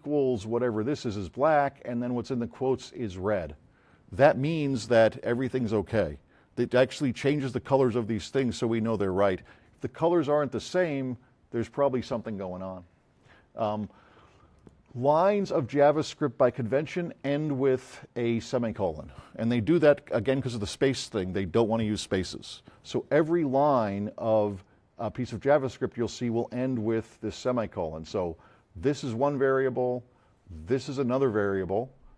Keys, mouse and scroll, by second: 14.5 click, 15.4 click, 27.3 click.